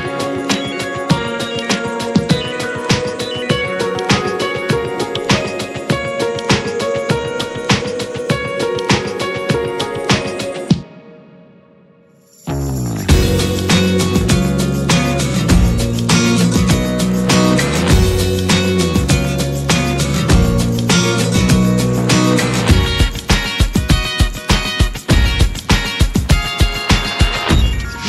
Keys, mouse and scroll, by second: 3.0 click, 3.2 scroll up 3, 3.5-4.3 middle drag, 4.3 click, 4.6 `, 5.1-8.1 middle drag, 8.1-8.4 scroll down 3, 8.4-9.5 middle drag, 9.5 Delete, 9.8 click, 10.8-14.4 drag, 19.1-20.5 drag, 20.5-21.5 middle drag, 21.5 scroll up 2, 21.7 shift+middle click, 22.0 scroll up 1, 22.2 s, 22.8 scroll down 3, 23.0 alt+middle click, 23.2 alt+middle click, 23.6-24.3 shift+middle drag, 24.3 click, 25.5 `, 26.1-27.7 middle drag, 27.7 /.